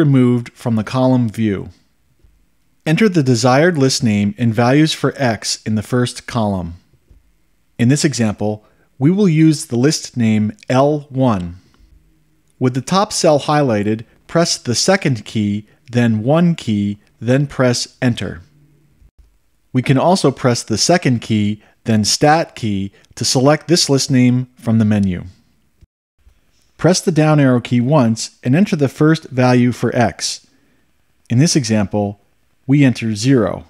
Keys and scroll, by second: 16.9 1, 18.3 Return, 28.6 Down, 33.5 0.